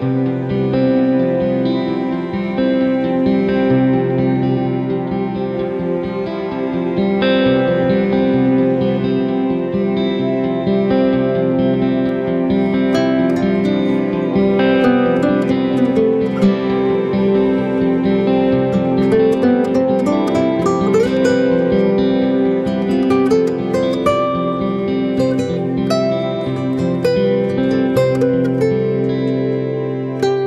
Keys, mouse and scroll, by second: 0.0 click, 0.2 click, 1.0 click, 1.5 Delete, 2.3 ctrl+z, 2.7 Tab, 3.9 a, 5.3 Delete, 5.3 ctrl+z, 5.9 Tab, 8.2-8.8 scroll down 2, 9.4 alt+h, 9.9 ctrl+h, 11.1 shift+h, 11.8 middle click, 12.6 scroll up 1, 12.8-13.3 scroll down 1, 13.3 Tab, 13.3 scroll down 1, 13.5 middle click, 13.9 scroll up 1, 14.4 click, 16.6 middle click, 16.9 g, 17.9-18.3 scroll down 4, 18.3 middle click, 19.1-19.8 scroll up 3, 19.9-20.4 scroll down 2, 20.3-20.8 scroll up 2, 21.5 click, 22.0 click, 24.3 click, 24.9 Delete, 26.0 ctrl+z, 26.3 middle click, 27.2 click, 28.6 click, 29.0 middle click, 29.6-30.1 scroll up 1, 30.1 click, 30.1-30.4 scroll up 2.